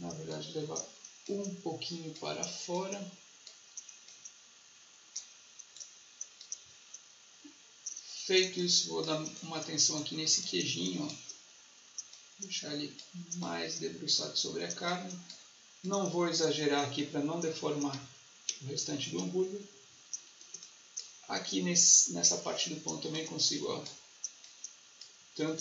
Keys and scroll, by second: 8.4 space, 17.9 ctrl+z, 20.4 space, 25.5 ctrl+z.